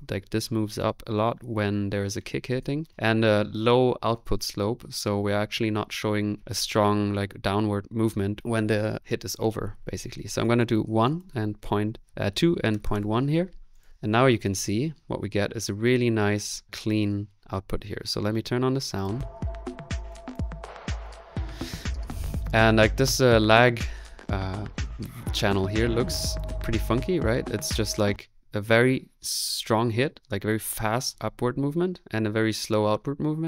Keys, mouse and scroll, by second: 19.0 click, 20.1 click, 20.6-23.9 middle drag, 26.2-27.9 drag, 27.9 space.